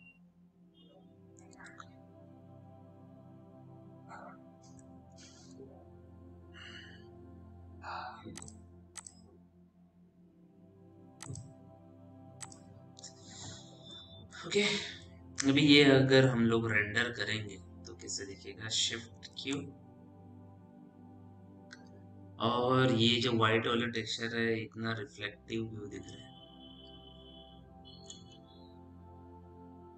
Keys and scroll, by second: 5.5 ctrl+h, 20.0 shift+q.